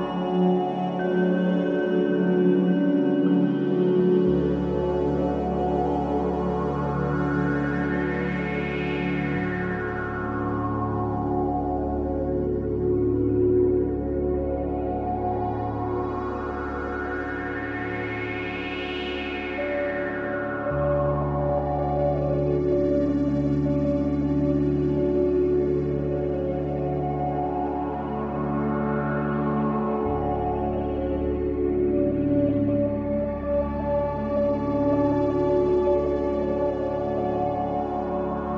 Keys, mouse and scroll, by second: 0.0-3.1 drag, 3.9-5.1 middle drag, 5.1-8.2 scroll down 1, 8.8-12.2 drag, 12.2 shift+a, 17.8 click, 18.9 shift+click, 20.0 ctrl+click, 22.3-25.4 drag, 28.8 click, 30.3-31.6 scroll up 2, 31.7 click, 34.0 click, 35.4-38.5 drag.